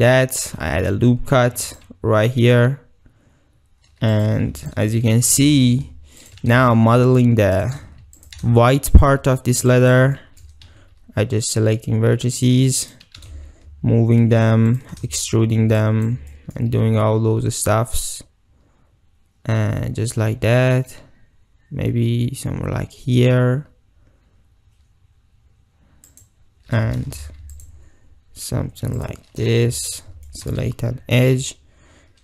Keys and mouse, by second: 0.7 ctrl+t, 1.5 ctrl+r, 4.2 click, 4.5 1, 4.6 click, 5.2 g, 5.4 g, 6.3 shift+click, 6.4 g, 7.6 shift+click, 8.2 click, 8.5 shift+g, 9.7 click, 10.2 shift+middle click, 10.7 e, 13.2 g, 14.8 shift+click, 15.2 shift+click, 15.8 click, 16.3 shift+click, 16.9 e, 26.1 click, 27.2 ctrl+r, 29.0 click, 29.7 2, 29.9 click, 30.3 shift+click, 30.5 right click, 31.2 e.